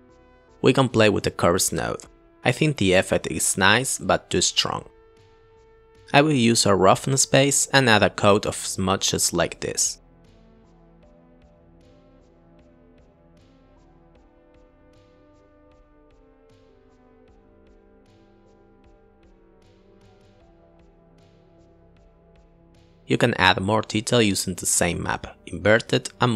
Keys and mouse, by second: 0.6 click, 1.0 click, 1.5 click, 9.9 click, 10.5 click, 11.1 click, 14.0 click, 14.6 click, 14.7 click, 14.9 click, 15.8 click, 16.6 click, 16.8 click, 16.8 ctrl+t, 17.0 click, 17.1 click, 17.2 click, 20.9 click, 21.2 shift+a, 21.8 BackSpace, 21.9 BackSpace, 22.4 shift+a, 23.6 click, 24.0 shift+a, 24.8 drag, 25.1-25.4 drag.